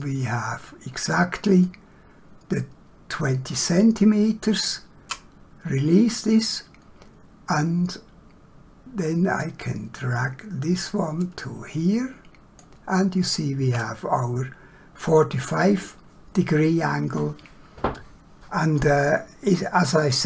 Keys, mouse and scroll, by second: 9.4 click.